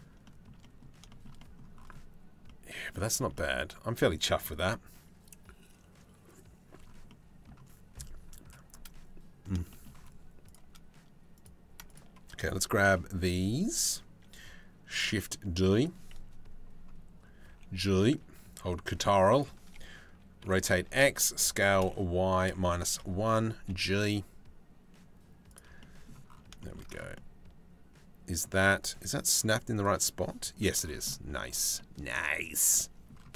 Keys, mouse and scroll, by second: 2.1 middle click, 3.0 shift+middle click, 6.7 middle click, 9.3 shift+click, 10.1 click, 11.0 click, 12.5 KP_7, 14.5 shift+d, 17.2 g, 20.0 r, 21.1 s, 23.2 g, 26.1 shift+middle click, 26.9-28.5 middle drag, 28.5 z, 30.4 middle click, 30.7 middle click, 31.5-33.3 drag.